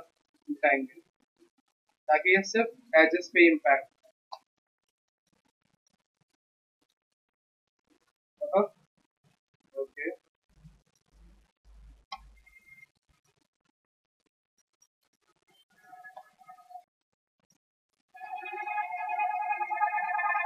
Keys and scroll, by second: 8.3 d.